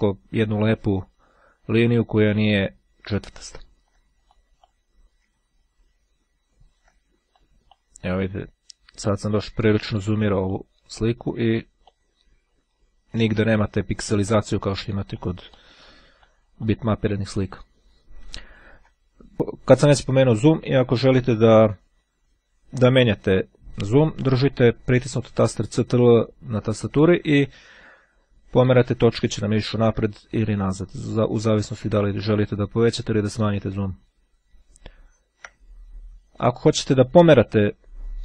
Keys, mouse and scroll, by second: 2.0-2.6 ctrl+scroll down 2, 2.6-3.8 ctrl+scroll down 1, 3.8 ctrl+scroll down 1, 4.4 ctrl+click, 5.5-6.9 ctrl+scroll up 1, 7.4 click, 8.0-8.6 ctrl+scroll up 1, 10.6 click, 14.1 click, 15.2 click, 16.2 click, 17.6-18.4 ctrl+scroll down 1, 18.4-19.1 ctrl+scroll down 1, 19.1-20.2 ctrl+scroll down 1, 25.8-27.8 ctrl+scroll up 2, 27.8-28.2 ctrl+scroll up 1, 29.4-30.1 ctrl+scroll up 2, 30.2-31.1 ctrl+scroll down 2, 31.1-31.6 ctrl+scroll down 1, 31.8-32.3 ctrl+scroll up 2, 32.3-32.9 ctrl+scroll up 1, 33.0-34.2 ctrl+scroll down 2.